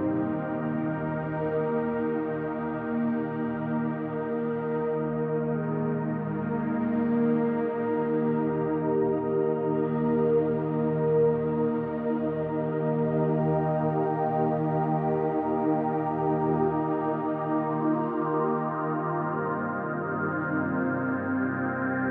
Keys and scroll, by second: 0.6 p, 1.3 =, 4.3 space, 4.6 space, 5.7 space, 6.0 space, 7.2 space, 7.5 space, 8.2 space, 8.5 space, 9.9-11.9 typing, 13.8-17.4 typing, 18.2 ctrl+z, 18.4 ctrl+z, 19.6-21.9 typing.